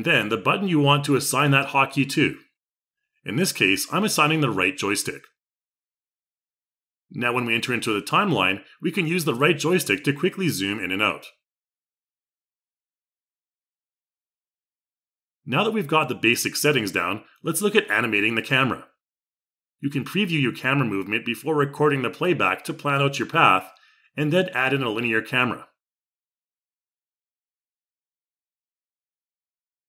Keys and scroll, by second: 1.4 a.